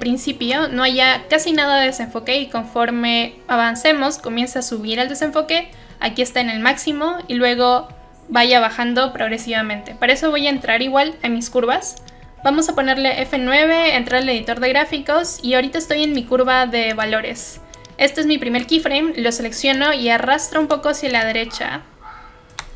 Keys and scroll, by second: 13.1 F9.